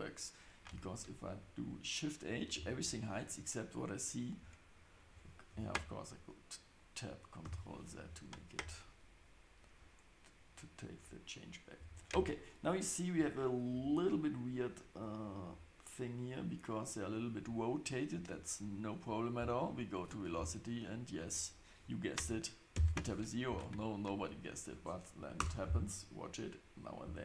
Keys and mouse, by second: 2.5 shift+h, 7.4 ctrl+z, 13.1 Tab, 13.7 Tab, 15.2 click, 20.1 click, 21.1-25.7 drag.